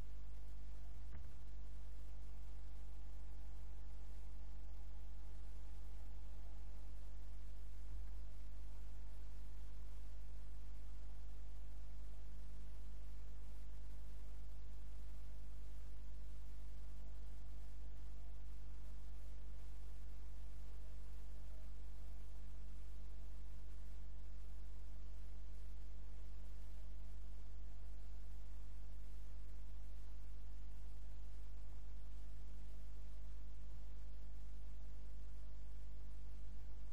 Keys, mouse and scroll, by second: 1.1 shift+a, 5.3 click, 7.9 Tab, 9.6-11.3 right drag, 10.3 click, 11.4 click, 11.4 right click, 12.0-13.9 right drag, 12.8 click, 15.1 right click, 15.8 middle click, 16.6 click, 16.6 right click, 17.9 right click, 18.7-19.8 middle drag, 20.5 right click, 21.4 middle click, 22.1 click, 22.1 right click, 23.4 click, 26.6-28.5 right drag, 28.7 click, 31.0-32.9 right drag, 31.8-34.8 drag, 34.7 right click.